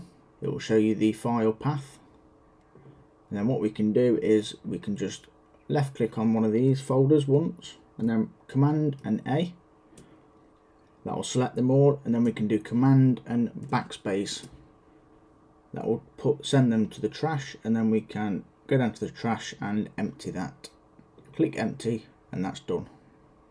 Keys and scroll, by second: 9.0 super+a, 13.6 super+BackSpace.